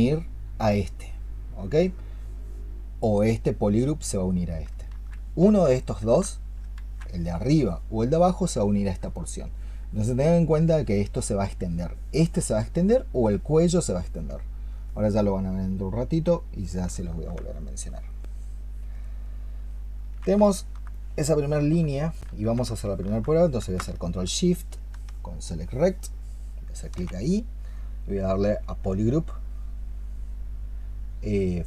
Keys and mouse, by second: 3.2 double click, 6.3 ctrl+z, 6.6 ctrl+z, 20.3 alt+click, 21.4 alt+click, 22.1 alt+click, 22.6 alt+click, 25.3 ctrl+shift+click, 26.3 ctrl+shift+click.